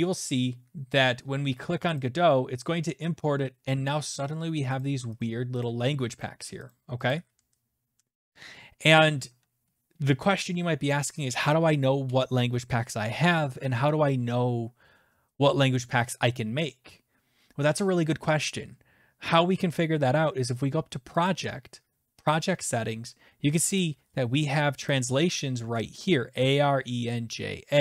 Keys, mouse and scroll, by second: 2.0 click, 4.2 click, 4.8 click, 5.2 click, 5.6 click, 6.2 click, 6.7 click, 7.1 click, 21.3 click, 22.3 click, 23.8 click, 24.9 shift+click, 25.3 shift+click.